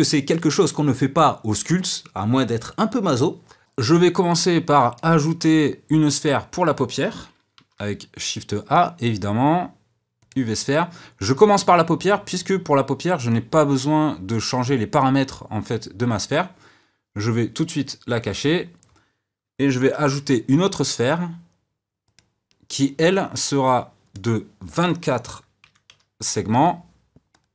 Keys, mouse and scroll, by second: 7.5 shift+a, 18.1 click, 19.9 shift+a, 24.0-27.2 drag.